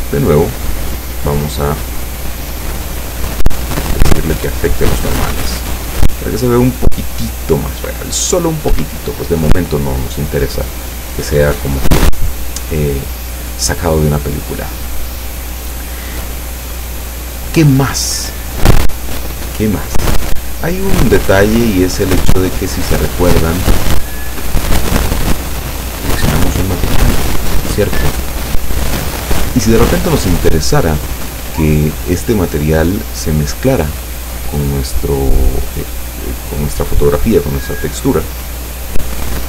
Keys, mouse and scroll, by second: 0.8 click, 1.6 click, 4.0 click, 5.3 p, 8.8 Escape, 11.4-12.9 scroll up 6, 14.6-16.7 scroll down 5, 23.7-24.0 scroll up 1, 24.0 scroll down 1, 24.1-24.8 scroll up 3, 25.6 click, 38.4 click.